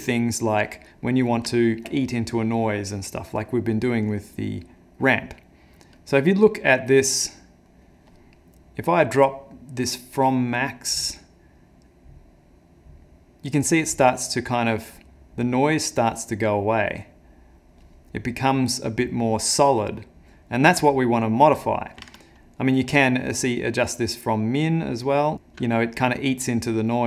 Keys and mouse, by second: 0.2 middle click, 1.1 middle click, 1.5 ctrl+middle click, 5.2 middle click, 6.0 middle click, 7.4 middle click, 9.3 click, 16.7 click, 21.5 click, 22.3 ctrl+z, 22.3 shift+click.